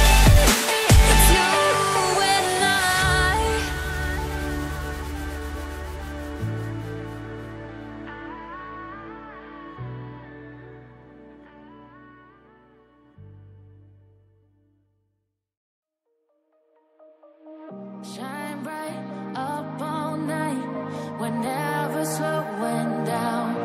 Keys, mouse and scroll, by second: 0.1-0.7 scroll up 1, 0.7 click, 6.7 double click, 8.1 click, 12.5 double click, 13.1 click, 18.5 double click, 19.2 click.